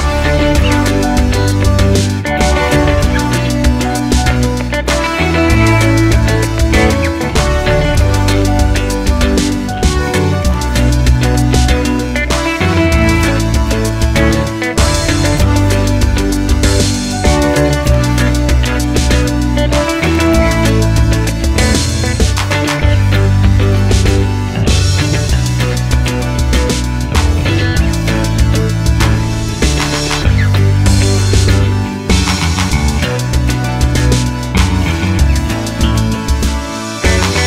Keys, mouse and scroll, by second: 1.5 x, 6.5-7.2 scroll up 1, 7.2 Tab, 7.7 click, 8.0 Tab, 8.5-10.8 middle drag, 10.8 click, 11.0-14.4 middle drag, 12.0 g, 14.4 click, 14.6-17.7 middle drag, 16.2 g, 17.7 click, 18.0-19.0 middle drag, 19.0 click, 23.7 middle click, 24.7 click, 27.4 g, 30.2 click, 30.3-37.4 middle drag, 31.9 g, 34.2 g.